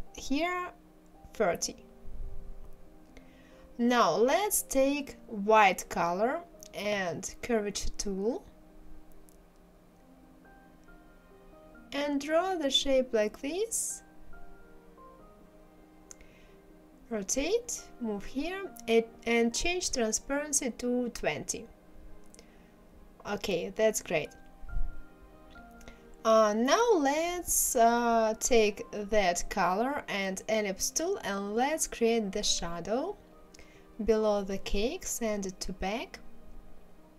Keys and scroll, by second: 19.9 KP_2, 20.2 KP_0, 20.4 Return.